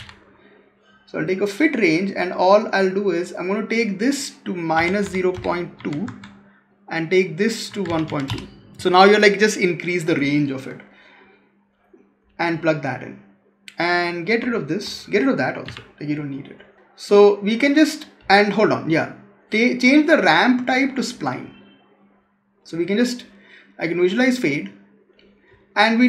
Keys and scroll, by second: 5.9 Tab, 15.5 Delete.